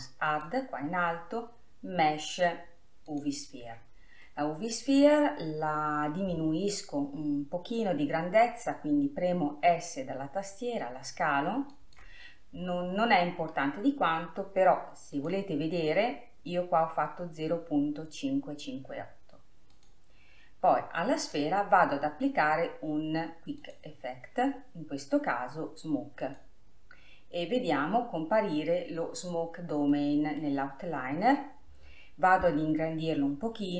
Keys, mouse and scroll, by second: 0.4-1.4 drag, 3.3 click, 4.3-11.8 middle drag, 11.8-12.7 s, 13.0-13.5 scroll up 3, 15.3-18.3 drag, 19.8 click, 21.3 click, 23.7-24.9 drag, 26.6 click, 30.0-33.2 middle drag.